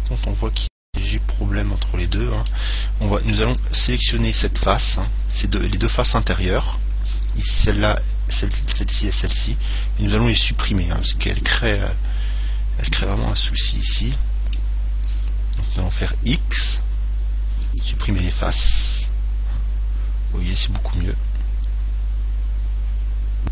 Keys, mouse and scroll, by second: 3.7 right click, 6.0 right click, 13.2-15.5 middle drag, 16.8 x, 19.2-21.1 middle drag.